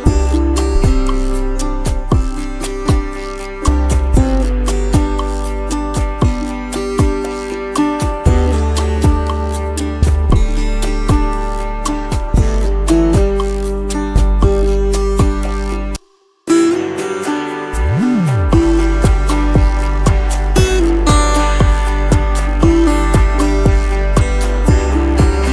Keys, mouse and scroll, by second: 2.9 alt+scroll up 1, 4.2 space, 5.0 t, 7.0 BackSpace, 14.9 t, 15.5 ctrl+a, 16.0 ctrl+v, 21.9 t, 22.7 Return, 23.9 ctrl+a.